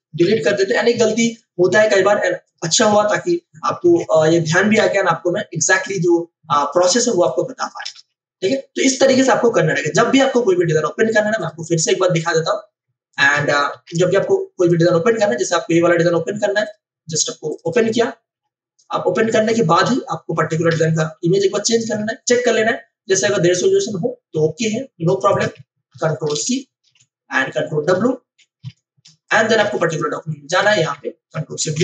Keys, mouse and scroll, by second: 0.2-1.2 typing, 0.4 click, 1.2 click, 3.7 ctrl+alt+shift+v, 4.5 space, 5.6 ctrl+alt+click, 7.2 click, 7.9 v, 8.4 click, 11.3 click, 13.7 ctrl+o, 15.1 scroll down 1, 16.6 click, 20.6 ctrl+alt+i, 25.3 click, 25.9 ctrl+a, 26.9 ctrl+w, 26.9 c, 28.6 ctrl+w, 29.0 space, 29.2 click, 29.5 space, 29.6 v, 29.8 click, 30.1 w, 30.5 click, 31.6 ctrl+alt+shift+v.